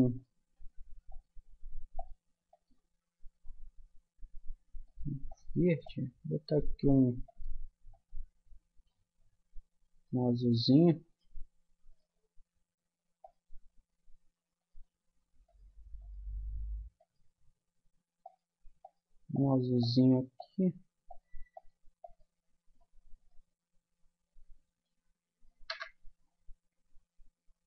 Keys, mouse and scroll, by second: 10.0-11.9 middle drag, 11.9-16.4 drag, 13.2 right click, 23.3-25.2 drag, 25.7 KP_0.